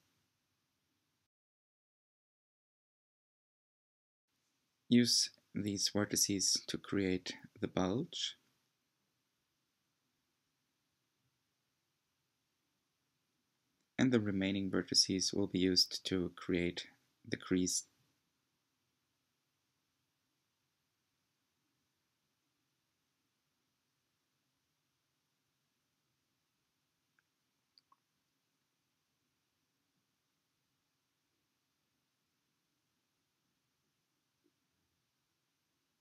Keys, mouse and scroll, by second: 4.5 g, 12.8 click, 16.9 click, 17.2 g, 20.0 click, 20.2 g, 23.4 click, 25.3 click, 26.1 r, 28.0 g, 31.4 click, 32.4 z, 32.8 z, 34.9 click.